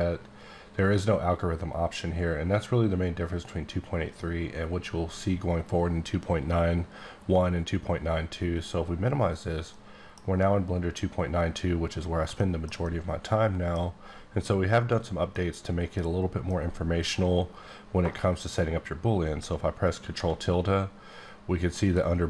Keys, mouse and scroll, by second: 8.6 click, 9.7 middle click, 11.7-12.1 scroll up 4, 12.3 shift+middle click, 14.8-15.3 scroll down 1, 15.3 middle click, 19.4 ctrl+middle click, 21.8 click.